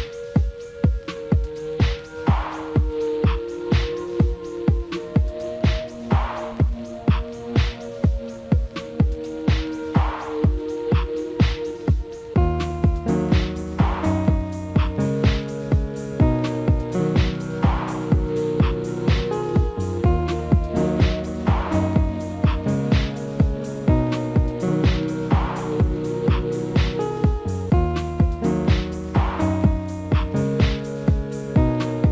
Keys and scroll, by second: 27.8 alt+w.